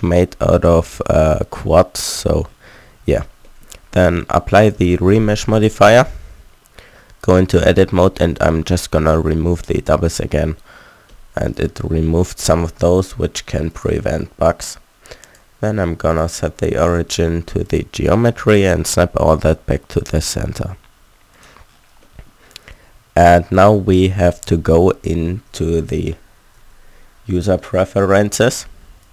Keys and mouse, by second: 0.5-2.4 middle drag, 2.9 z, 4.7-6.4 drag, 5.9 Tab, 7.5 a, 7.7 w, 12.0 Tab, 15.5 click, 16.1 middle click, 16.2-18.0 drag, 18.7 shift+s, 22.0 click, 22.3 click, 24.6 Tab, 25.2 a, 25.4 a, 25.6 Tab, 26.7 Tab.